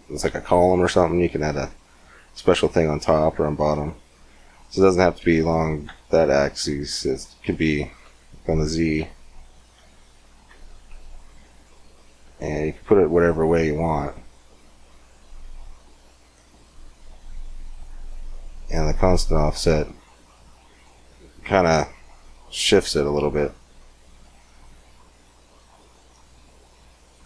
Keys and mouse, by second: 4.3-6.5 drag, 11.8-15.4 middle drag, 16.2-17.5 middle drag, 17.5-21.7 drag, 24.4-26.1 drag, 26.1 middle click.